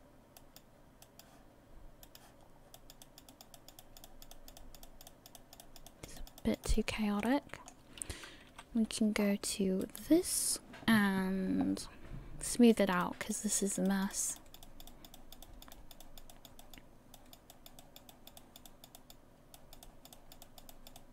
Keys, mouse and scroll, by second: 0.4 click, 1.0 click, 2.0 click, 2.4-3.0 scroll down 2, 2.8 click, 3.0 click, 3.8 click, 4.3 click, 4.6 click, 5.1 click, 5.4 click, 6.2 click, 6.4 click, 6.9-7.4 scroll down 5, 7.3 middle click, 8.5 KP_1, 9.2 scroll up 5, 10.1 right click, 12.7 click, 13.0 click, 13.6 click, 13.9 click, 14.4 click, 14.6 click, 15.2 click, 15.4 click, 16.3 click, 16.6 click, 17.5 click, 17.8 click, 18.4 click, 18.7 click, 19.8 click, 20.1 click, 20.7 click, 21.0 click.